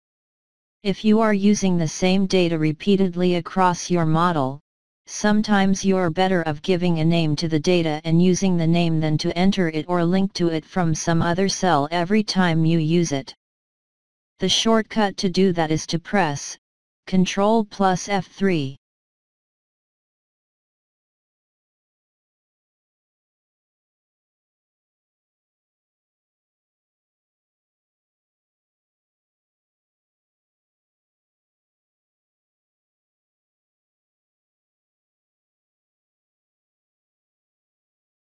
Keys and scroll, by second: 18.3 ctrl+F3, 27.7 BackSpace, 28.9 BackSpace.